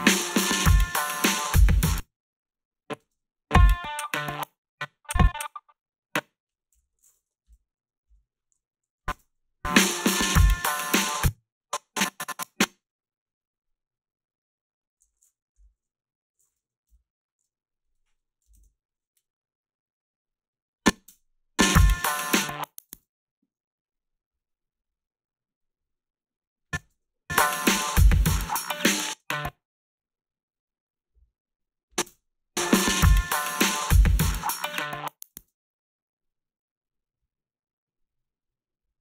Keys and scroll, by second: 1.7 space, 3.0 space, 4.3 space, 6.8 g, 8.1 Delete, 11.0 space, 18.4 4, 18.5 Return, 21.1 space, 22.9 space, 26.8 space, 29.2 space, 32.1 space, 35.4 space.